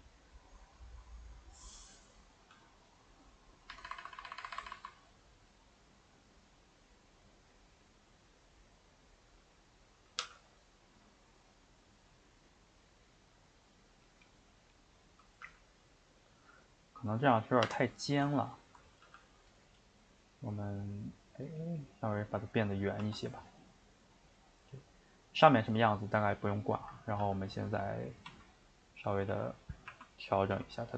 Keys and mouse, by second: 2.4 click, 2.5 g, 9.4 click, 10.2 g, 14.3-15.4 middle drag, 15.4 g, 18.7 ctrl+Right, 19.1 g, 22.8 middle click, 23.0 Tab, 23.4-27.2 middle drag, 27.2 g, 29.9 r, 30.5 s.